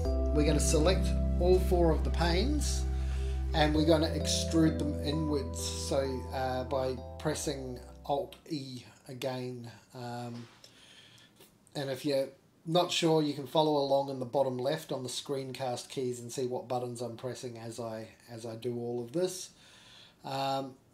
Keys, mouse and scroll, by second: 0.8 click, 1.2 g, 3.7 click, 4.0 g, 6.8 click, 7.1 g, 7.6 middle click, 7.6 scroll up 1, 7.6 3, 7.6 click, 8.1 shift+click, 8.7 middle click, 9.4 middle click, 10.2 middle click, 11.1 middle click, 12.3 alt+e, 15.7-17.2 middle drag, 17.3-17.7 scroll up 2, 17.7 shift+middle click, 18.2 middle click, 19.0 alt+shift+click, 19.0 scroll down 2, 19.1 middle click, 19.5 u.